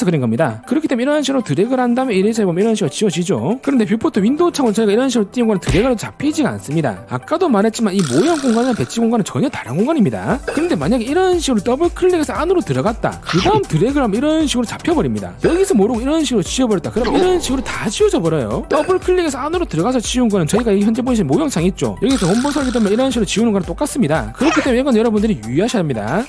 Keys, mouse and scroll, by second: 1.4 click, 2.2 click, 6.1 click, 6.6 click, 12.5 click, 12.7 click, 13.7 click, 14.6 click, 23.1 e, 23.2 right click, 23.4 click, 23.8 click.